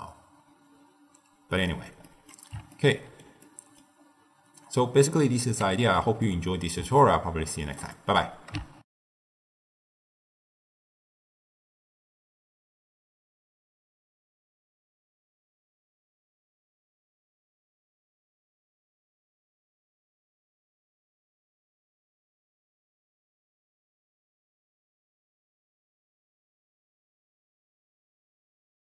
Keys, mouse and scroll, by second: 2.0-4.0 middle drag, 4.0-5.0 scroll down 4, 5.0 click, 5.7 ctrl+x, 6.1-8.8 middle drag, 8.8 ctrl+alt+shift+w.